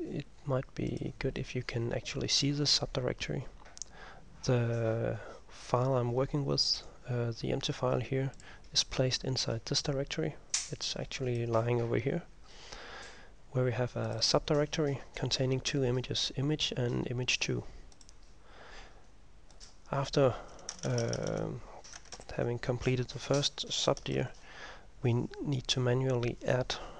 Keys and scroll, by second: 22.3 ctrl+m, 24.2 /.